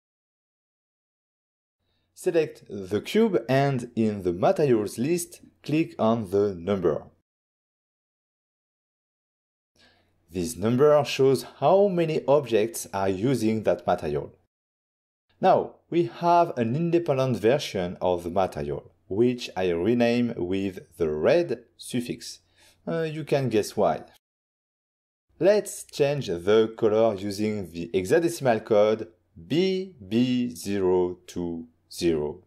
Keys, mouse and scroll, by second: 2.8 scroll up 1, 5.9 click, 7.3 click, 10.2 click, 10.6 click, 14.9 click, 15.2 click, 16.9 click, 18.0 click, 19.3 BackSpace, 20.3-21.3 typing, 21.7 Return, 23.5 ctrl+middle click, 26.4 click, 27.4 click, 28.6 shift+b, 29.9 0, 30.5 2, 31.1 0, 31.8 0.